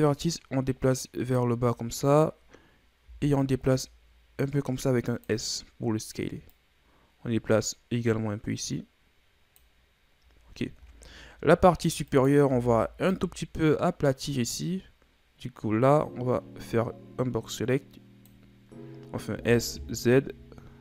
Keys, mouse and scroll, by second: 1.7-3.0 scroll up 2, 3.0 s, 6.5-9.5 drag, 10.4-10.9 scroll down 1, 10.9 scroll up 2, 11.4 z, 12.1 right click, 12.5 b, 19.3 s.